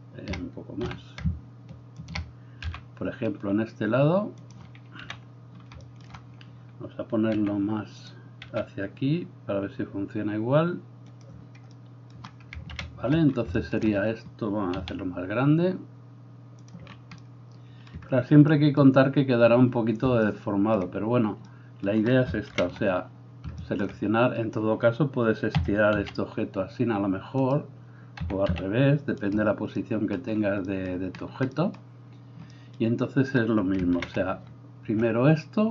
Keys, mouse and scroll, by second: 0.8 r, 2.7 g, 5.0 KP_3, 7.4 r, 8.5 g, 13.1 ctrl+KP_1, 14.8 s, 22.8 ctrl+KP_1, 25.6 s, 28.3 s, 34.2 ctrl+KP_1.